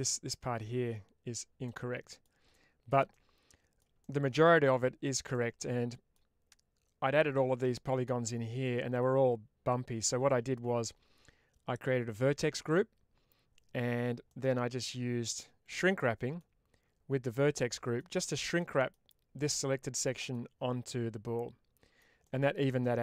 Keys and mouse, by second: 1.5 middle click, 2.4 shift+middle click, 3.0 middle click, 3.9 shift+middle click, 5.2 middle click, 8.5-10.6 middle drag, 14.2-16.6 middle drag, 17.1 middle click, 18.5 middle click, 19.9 middle click, 20.8-23.0 middle drag.